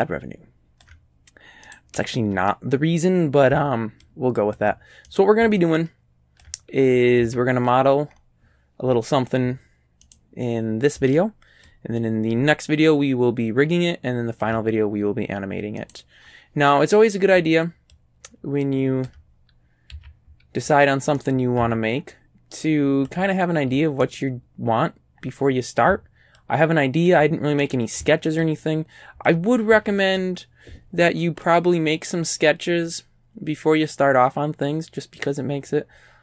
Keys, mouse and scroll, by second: 1.7 right click, 4.1 ctrl+click, 5.1 ctrl+right click, 5.8 ctrl+click, 7.2 a, 10.1 right click, 11.7-14.6 ctrl+drag, 15.8 right click, 16.2 scroll up 1, 17.1 scroll up 1, 18.0-19.3 ctrl+drag, 19.3-19.8 ctrl+scroll down 2, 20.0 a, 21.2 right click, 22.2-23.3 ctrl+drag, 24.1 right click, 25.6 middle click, 26.4 ctrl+click, 27.7 right click, 28.5-29.5 ctrl+drag, 29.7 ctrl+a, 31.4 click, 34.4 middle click, 35.2 middle click, 35.7-36.2 scroll down 1.